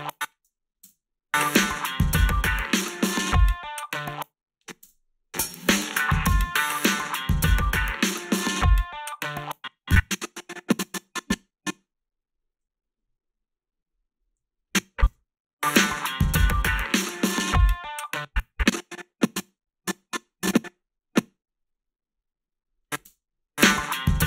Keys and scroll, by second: 0.9 space, 3.9 space, 4.8 space, 9.2 space, 15.1 space, 18.0 space, 23.1 space.